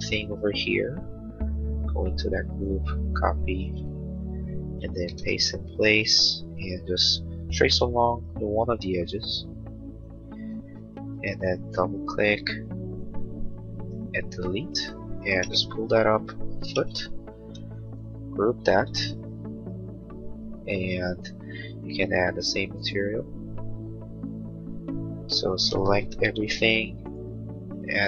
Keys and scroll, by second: 3.6 ctrl+c, 4.0 space, 4.1 Escape, 6.9 l, 11.2 space, 13.8 Delete, 15.4 p, 17.0 Return, 17.4 space, 25.5 ctrl+a, 26.3 b.